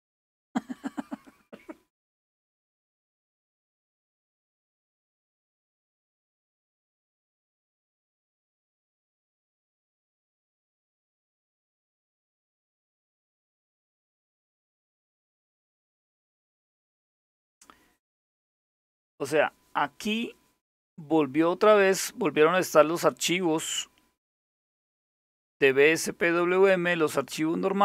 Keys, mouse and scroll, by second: 1.7 Return, 2.8-6.1 typing, 12.1 super+Return, 13.6-16.6 typing, 15.3 Return, 24.5 click.